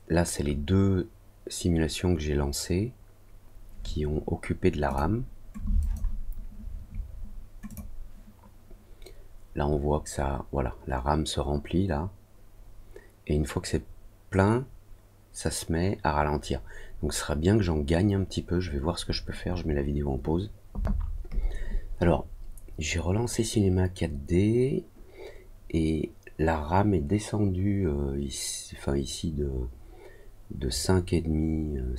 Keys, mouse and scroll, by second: 4.8 click, 5.7 click, 7.6 click.